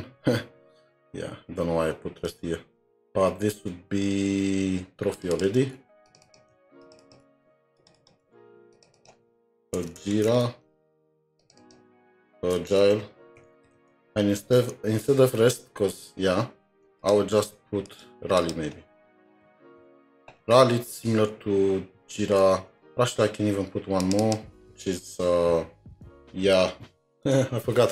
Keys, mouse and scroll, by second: 0.2-1.2 scroll down 5, 2.3 alt+Tab, 2.9-3.4 scroll down 2, 5.3 scroll down 2, 5.6 typing, 6.2 double click, 7.0 typing, 7.0 double click, 8.0 double click, 8.9 typing, 9.0 double click, 10.3 typing, 11.6 double click, 12.2-14.3 typing, 14.6 alt+Tab, 16.8 alt+Tab, 17.5 alt+Tab, 17.9 shift+click, 18.4 shift+click, 19.2-20.3 typing, 20.9 scroll, 20.9-21.4 scroll down 1, 24.2 typing, 24.2 double click.